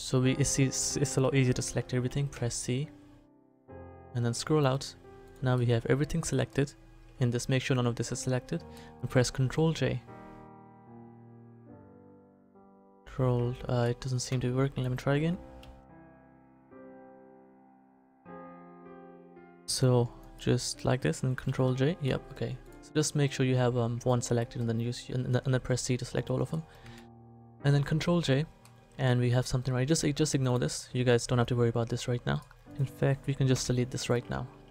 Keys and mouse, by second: 2.3 c, 5.7 click, 5.9 click, 9.4 ctrl+j, 11.8 ctrl+j, 14.3 z, 15.6 ctrl+j, 19.6 c, 20.7 click, 21.4 ctrl+j, 25.5 c, 26.8 a, 30.4 click, 32.3 right click, 33.5 Delete.